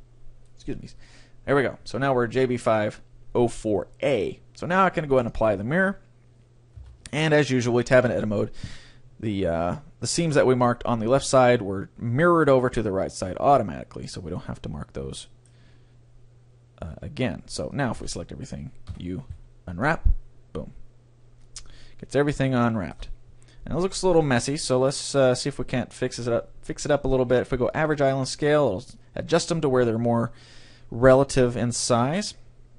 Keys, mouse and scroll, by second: 0.0-1.8 drag, 5.2-7.1 drag, 6.9 Tab, 7.7-9.7 middle drag, 10.7-14.6 middle drag, 17.3-18.9 drag, 18.0 a, 18.9 u, 21.5-23.3 drag, 22.5 right click, 23.3 middle click, 24.1 middle click, 24.9-26.7 drag, 24.9 right click, 25.1 middle click.